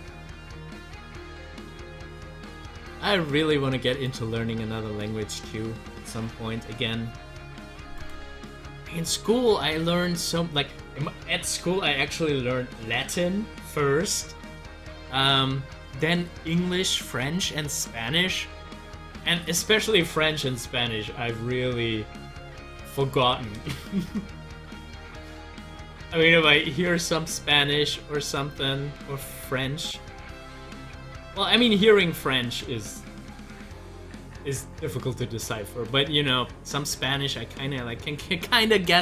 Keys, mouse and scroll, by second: 4.5 scroll down 1, 8.0 click, 10.2 scroll up 1, 25.8 click, 35.8 click, 38.9 Delete.